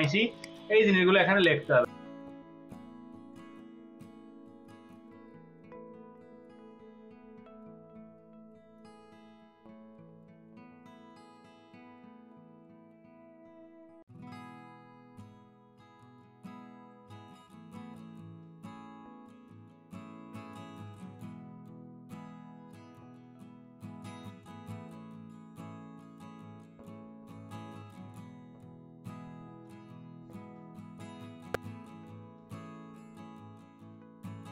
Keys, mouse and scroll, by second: 0.3 double click, 0.8 space, 2.0 space, 4.6-5.5 scroll up 3, 6.3-7.4 scroll down 4, 7.5 right click, 10.8-11.8 scroll down 2, 12.3 space, 12.6-15.2 drag, 12.6 space, 13.0-14.3 ctrl+middle drag, 13.1 ctrl+v, 14.4 ctrl+space, 14.4 middle click, 14.6 ctrl+space, 18.3 click, 18.3 v, 18.6 right click, 19.9 ctrl+alt+click, 20.6 space, 21.8 ctrl+space, 22.0 ctrl+click, 22.1 ctrl+space, 22.2 ctrl+space, 25.2 ctrl+space, 25.4 ctrl+click.